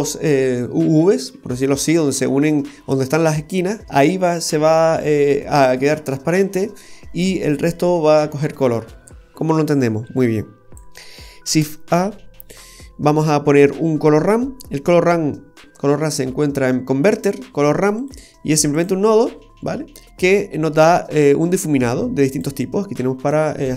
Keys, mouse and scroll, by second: 8.8-9.5 scroll down 4, 9.5 middle click, 10.2 click, 11.5 shift+a, 20.3-21.7 scroll up 3, 22.3 click.